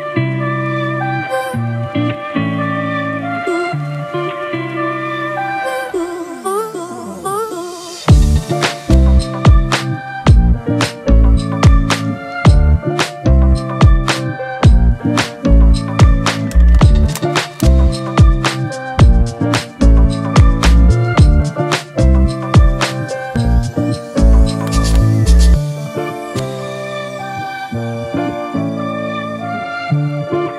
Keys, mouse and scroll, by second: 0.3 alt+scroll up 1, 2.0-2.5 alt+scroll up 1, 13.4 alt+BackSpace, 14.3 ctrl+d, 15.1-15.6 alt+scroll up 1, 21.5 alt+click, 23.1 ctrl+t, 24.0 alt+shift+click, 27.0 alt+shift+click.